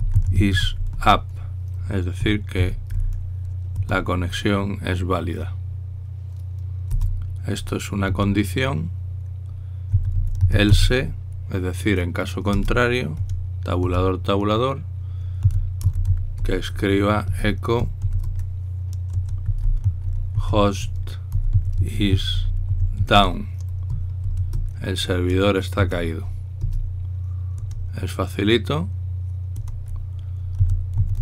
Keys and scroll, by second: 0.0-2.2 typing, 3.4 typing, 7.7 Return, 8.8 Tab, 10.4-11.9 typing, 13.3 Return, 13.9 Tab, 14.6 Tab, 16.2-24.9 typing, 27.4 Return, 28.4 Tab, 28.4 typing, 30.3 Tab, 30.3-31.2 typing.